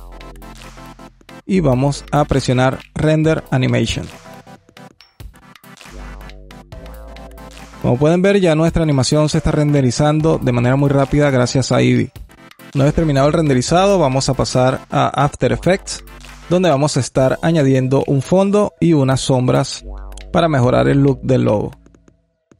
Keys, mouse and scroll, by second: 0.0-2.6 drag.